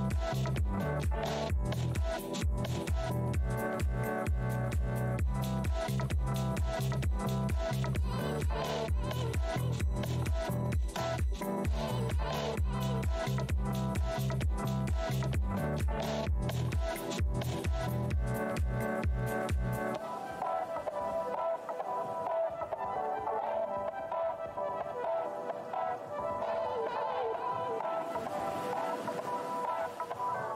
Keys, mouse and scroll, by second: 2.5 click, 2.6-3.3 typing, 3.4 click, 5.0 z, 5.1 click, 6.5 w, 8.5 right click, 9.1 scroll down 1, 9.7-10.4 scroll down 1, 9.7 w, 11.2 scroll down 1, 12.2 click, 13.1 right click, 14.2 click, 14.5 ctrl+right click, 15.7 scroll up 1, 17.5 click, 17.6 w, 17.7-18.1 scroll down 2, 18.4-19.3 alt+scroll, 18.5 w, 19.3 ctrl+s, 22.2-24.2 scroll down 1.